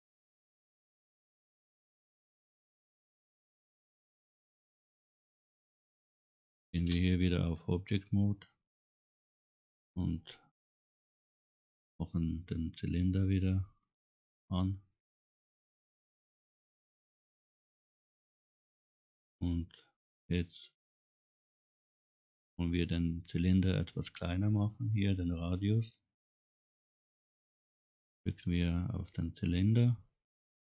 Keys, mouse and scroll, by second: 1.6 click, 2.5 click, 3.0-3.4 scroll down 2, 7.4 click, 9.0 click, 12.5 click, 14.7-15.1 scroll down 2, 15.7-17.1 middle drag, 17.8 middle click, 20.4-22.1 middle drag, 23.1 middle click, 24.3 scroll down 1, 24.5 scroll up 2, 24.9 middle click, 29.0 click.